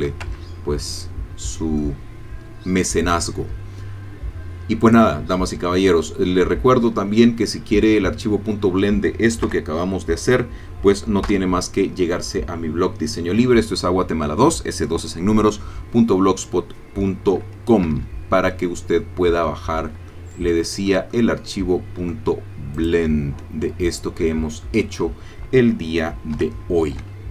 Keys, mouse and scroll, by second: 0.3 shift+Tab, 1.0 scroll down 2, 1.8-3.4 drag, 4.8 click, 5.9-9.0 middle drag, 9.4 KP_0, 11.3 F12, 17.9 Escape, 18.5-19.6 middle drag, 20.1 shift+middle click, 21.1-22.3 shift+middle drag, 22.8 click, 26.4 F12.